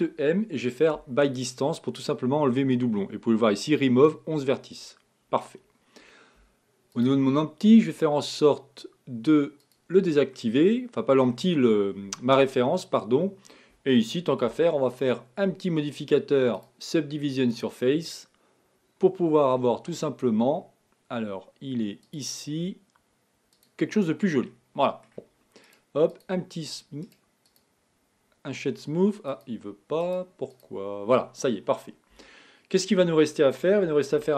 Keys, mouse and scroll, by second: 7.1 click, 9.7 click, 10.4-12.4 middle drag, 12.4 KP_1, 14.5 Tab, 16.6 click, 17.6-20.7 drag, 23.6 click, 24.5-25.7 middle drag, 25.7-29.3 right drag, 29.3 click, 30.0-32.2 right drag, 32.2 KP_1, 34.1 shift+a.